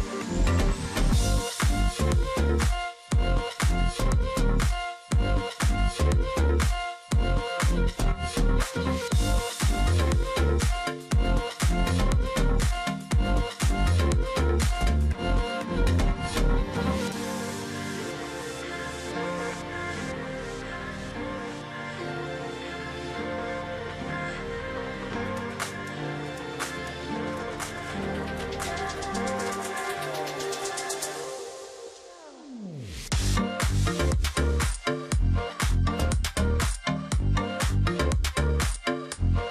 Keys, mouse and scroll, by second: 0.4 alt+click, 1.2 double click, 1.4 alt+scroll down 1, 1.6 space, 2.3-2.7 alt+scroll down 1, 2.7 alt+scroll up 1, 4.8 double click, 7.1 double click, 7.5 ctrl+click, 7.7 alt+scroll down 1, 8.0 space, 8.5 alt+scroll up 1, 9.3 alt+scroll up 1, 9.5 space, 10.7 space, 11.3 ctrl+z, 12.0 ctrl+z, 13.6 alt+click, 14.8 alt+click, 16.3 alt+scroll down 1, 17.0-17.4 alt+scroll up 1, 17.4 ctrl+click, 19.4 double click, 20.9 double click, 21.2-21.6 alt+scroll up 1, 21.6 ctrl+click, 23.7 ctrl+z, 25.4 alt+click, 25.5 ctrl+click, 26.9 alt+click, 28.1 ctrl+shift+click, 29.0 alt+click, 29.2 ctrl+click, 29.5-30.0 alt+scroll down 1, 30.0-30.6 alt+scroll up 1, 30.9 alt+scroll up 1, 31.2 space, 33.3 double click, 34.3 alt+scroll down 1, 34.4 space, 35.3 ctrl+click, 35.6 space, 37.0 alt+scroll down 1, 37.2-37.5 alt+scroll, 37.5 alt+scroll up 1, 38.7 shift+click.